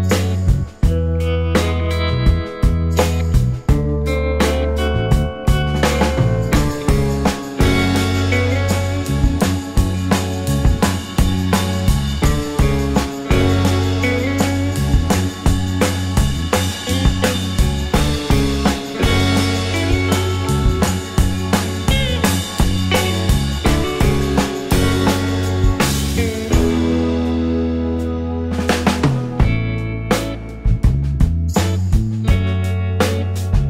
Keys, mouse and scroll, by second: 1.9 alt+click, 3.4 double click, 4.2-9.0 typing, 9.6 Return, 12.8 scroll down 1, 13.2 alt+click, 15.7-17.3 typing, 17.2 scroll up 1, 18.7 w, 19.4 scroll up 1, 20.0 alt+middle click, 23.7 space, 24.1 space, 24.8 alt+click, 26.5 scroll, 26.8 alt+scroll up 1, 26.8 alt+click, 29.5 scroll, 29.6 alt+scroll up 1, 30.9 alt+scroll down 1, 31.1 alt+click, 32.8 shift+click.